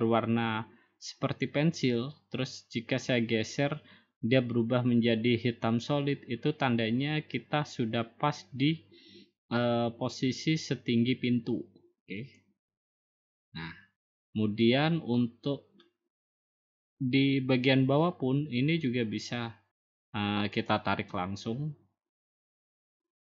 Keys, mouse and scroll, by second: 12.7 click, 20.6-21.8 drag.